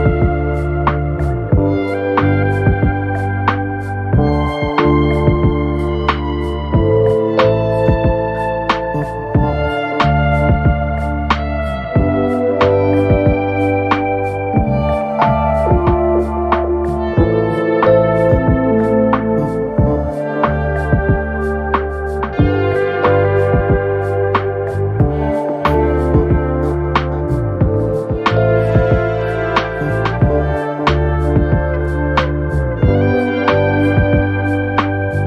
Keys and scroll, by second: 4.1 BackSpace, 6.8 KP_6, 6.9 KP_6, 7.6 Return, 10.7 BackSpace, 13.6 KP_6, 13.8 KP_0, 14.2 Return, 19.0 BackSpace, 21.4 KP_4, 24.6 BackSpace, 26.9 KP_1, 27.1 KP_5, 27.5 KP_0.